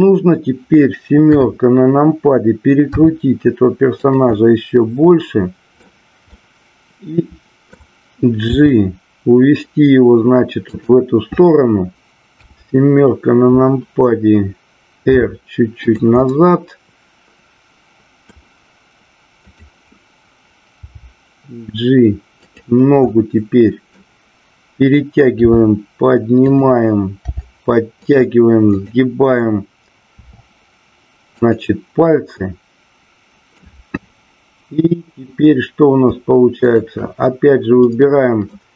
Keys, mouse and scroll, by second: 1.3 KP_7, 2.9 r, 4.0 click, 4.3-5.8 middle drag, 6.3-7.8 middle drag, 10.8 click, 12.2 KP_7, 15.1 r, 16.2-18.3 middle drag, 19.4 click, 22.6 click, 23.1 middle click, 25.3 r, 26.4 click, 27.2 g, 31.5 click, 32.4-33.6 middle drag, 34.3-35.2 drag, 37.8-38.4 middle drag.